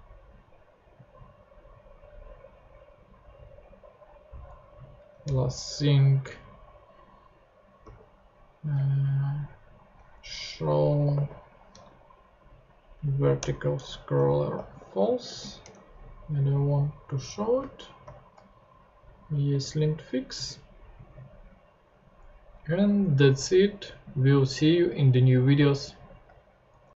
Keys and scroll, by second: 5.2 Return, 7.8 s, 10.3-11.7 typing, 12.9 Down, 13.4 Return, 14.3-15.7 typing, 18.0 shift+super+p, 19.5 super+Tab.